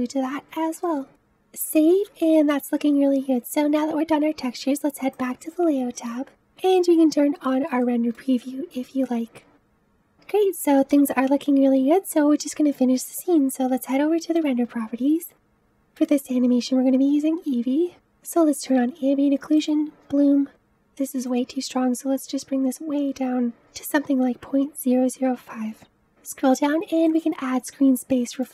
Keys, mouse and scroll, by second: 0.8-5.2 middle drag, 5.2 click, 6.7 click, 7.8-18.3 shift+middle drag, 18.3 click, 19.6 click, 22.1-23.5 drag, 27.0 click.